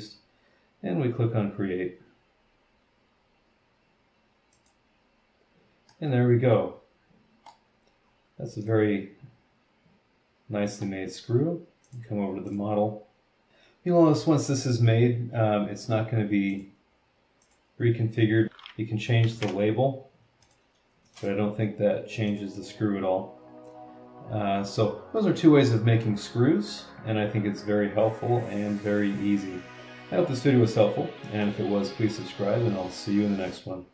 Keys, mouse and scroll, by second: 4.5 click, 5.9 middle click, 6.1-7.7 drag, 6.1-7.7 right drag, 8.1 scroll down 1, 8.6 click, 8.7-11.0 middle drag, 11.8 click, 12.5 click, 13.5 click, 16.5 click, 17.4 click, 18.4 BackSpace, 19.2 KP_4, 19.3 KP_5, 20.4 click, 21.1 click, 22.3 click, 26.0 middle click, 26.2-31.6 drag.